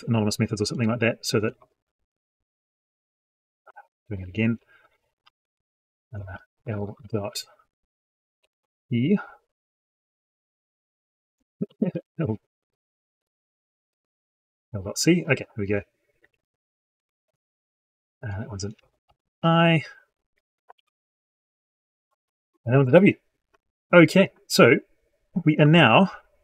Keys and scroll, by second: 3.6 ctrl+z, 17.3 ctrl+v, 20.6 ctrl+v.